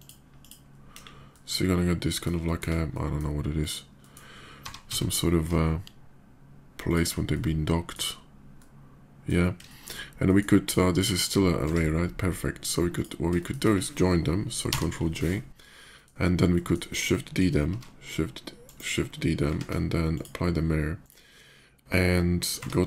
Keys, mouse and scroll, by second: 0.1 click, 0.4 middle click, 0.6 KP_5, 1.0-2.0 middle drag, 2.2 shift+middle click, 2.6-3.1 shift+middle drag, 3.3 click, 3.7 middle click, 4.3 g, 4.5 z, 5.2 shift+g, 6.6 shift+click, 7.0 shift+middle click, 8.3 shift+middle click, 9.4 shift+middle click, 9.9 middle click, 10.3 click, 10.8 Tab, 12.7 click, 13.2 shift+middle click, 14.4 ctrl+j, 15.3 middle click, 15.7 middle click, 16.1 middle click, 16.3 middle click, 16.8-17.3 middle drag, 17.6 shift+d, 18.4 right click, 19.4 ctrl+`, 19.9 click, 20.8 right click, 22.3 Tab.